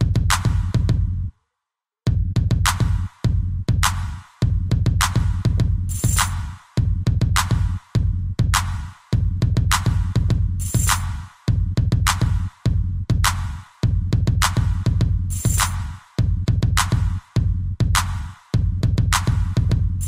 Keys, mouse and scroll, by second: 9.5 a, 10.1 b, 10.6 click, 12.5 ctrl+c, 12.9 Up, 13.6 ctrl+v, 15.0 Right, 15.3 Right, 15.6 Right.